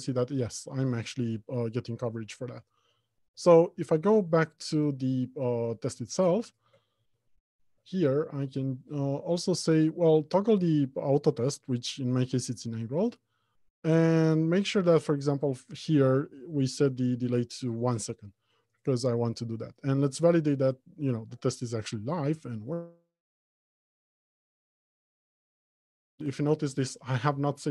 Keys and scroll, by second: 7.2 ctrl+Tab.